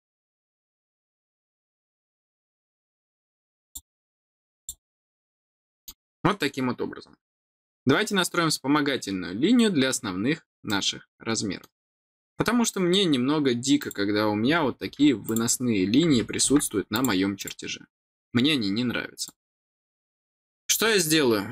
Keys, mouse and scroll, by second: 0.1 click, 1.9 click, 3.5 click, 4.5 click, 5.5 middle click, 10.6 middle click, 12.1-12.5 scroll down 2, 13.8 click, 15.2 click, 16.9 click, 17.4 click, 18.7 middle click, 18.7 scroll down 1, 19.2 click.